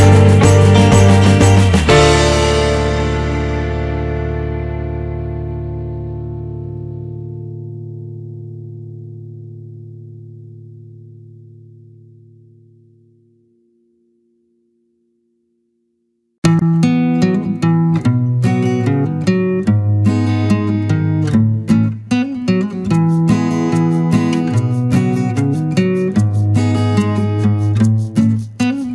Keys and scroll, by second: 1.1 Escape, 2.1 BackSpace, 6.2 Up, 8.8 Return, 11.2 ctrl+z, 20.5 Down, 21.6 Return.